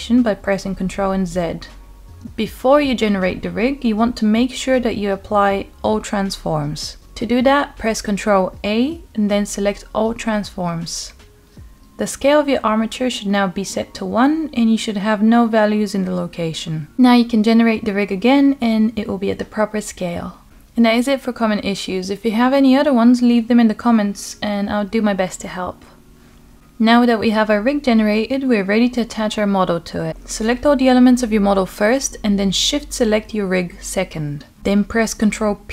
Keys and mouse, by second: 0.2 ctrl+z, 0.9-1.4 middle drag, 4.0 click, 8.1 ctrl+a, 19.5 click, 20.8-23.4 middle drag, 25.2 ctrl+click, 28.4-30.2 middle drag, 31.4 shift+click, 32.6-34.0 middle drag, 35.1 ctrl+p.